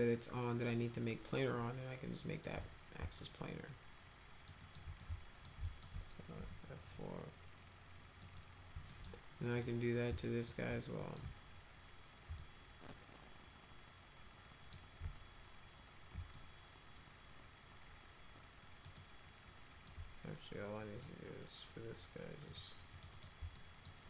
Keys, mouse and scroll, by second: 2.6 middle click, 3.2-4.5 alt+middle drag, 4.6 alt+middle click, 5.0 alt+middle click, 5.7 alt+middle click, 6.4 F3, 8.2 middle click, 8.9 middle click, 9.6 click, 10.2 alt+middle click, 11.0 middle click, 12.4-14.7 alt+middle drag, 16.3-18.8 alt+middle drag, 19.0 alt+middle click, 20.9 click, 22.5 click, 22.9 click, 23.1 click, 23.6 alt+middle click.